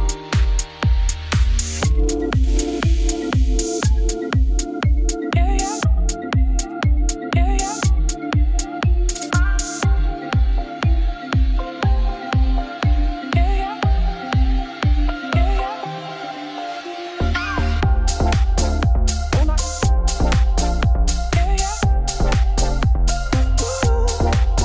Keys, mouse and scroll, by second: 0.1 g, 2.0 middle click, 2.4 Tab, 2.6 g, 6.2 Tab, 7.5-8.7 middle drag, 9.3 ctrl+r, 10.3 ctrl+r, 11.5 3, 11.6 click, 11.7 shift+click, 12.0 i, 14.0 click, 14.1 shift+click, 14.3 KP_1, 14.6 scroll up 2, 14.8 g, 18.1 scroll down 2, 18.5 click, 18.7 shift+click, 19.2 x, 19.6 middle click, 20.2 ctrl+z, 21.0 2, 21.1 alt+click, 21.7 middle click, 22.5 shift+d, 22.8 p, 23.1 Tab, 23.3 click, 23.5 click, 23.8 click, 24.0 click, 24.1 click, 24.3 click.